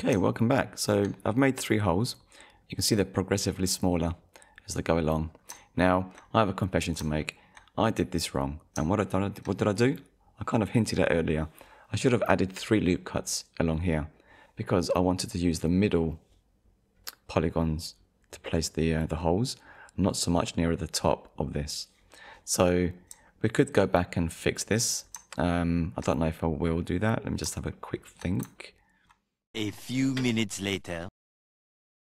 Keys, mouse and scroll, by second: 0.5 shift+middle click, 2.6 scroll up 1, 5.3-5.7 scroll down 2, 5.8 shift+middle click, 7.2 shift+middle click, 8.4 scroll up 1, 9.0 shift+middle click, 22.7 scroll down 1, 23.3 shift+middle click, 24.6-25.0 scroll up 1, 25.1-25.5 scroll down 2, 25.5 shift+middle click, 27.3-27.7 scroll up 2, 27.8 shift+middle click, 28.6 ctrl+middle click.